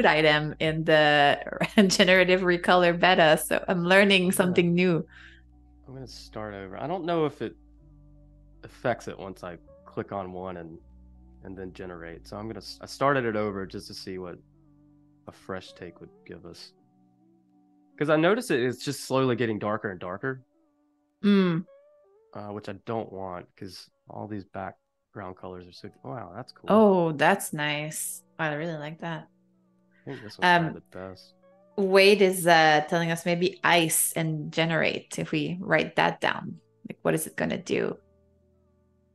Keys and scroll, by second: 3.4 super+c, 37.9-39.1 typing.